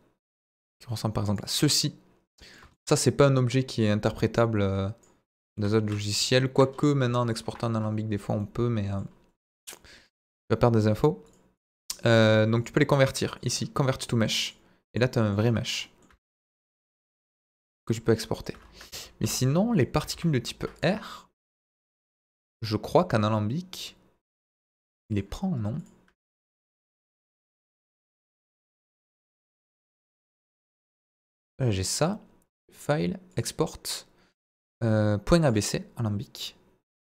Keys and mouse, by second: 0.3 drag, 1.3 click, 1.7 click, 2.3 middle drag, 3.9-5.1 drag, 5.3 middle drag, 7.4 KP_Decimal, 8.4-9.0 middle drag, 11.3 click, 11.6 click, 12.5 click, 13.3 click, 14.0 middle click, 15.1 middle drag, 15.8 middle click, 16.1 Tab, 16.3-18.5 middle drag, 18.5 Tab, 18.9 ctrl+z, 19.2 ctrl+z, 19.8 middle click, 20.1 ctrl+z, 20.8 drag, 22.0 ctrl+z, 22.4 ctrl+z, 23.2 click, 24.7 click, 25.1 click, 28.1-29.6 drag, 30.8 Delete, 31.3 middle drag, 31.9 click, 32.7-35.5 drag.